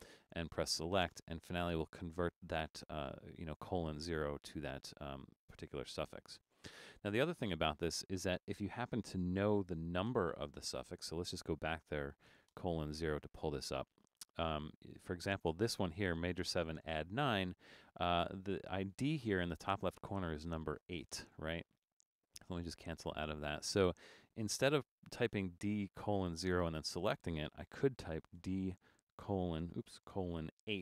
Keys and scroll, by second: 9.0-10.8 typing, 12.6 Return, 24.6 BackSpace, 28.3-30.8 typing.